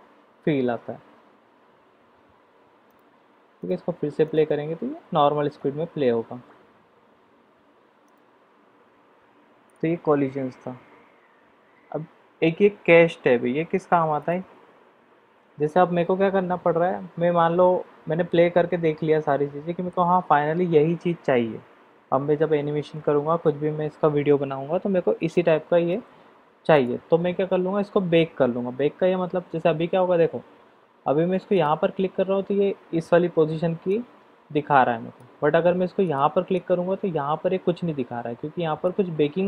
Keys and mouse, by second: 3.6 click, 4.2 click, 8.3 click, 9.7 click, 14.2 click, 17.6-20.1 middle drag, 25.3-25.8 middle drag, 26.7 click, 31.5 click, 33.9-35.2 drag, 36.0 click, 36.8-38.8 drag.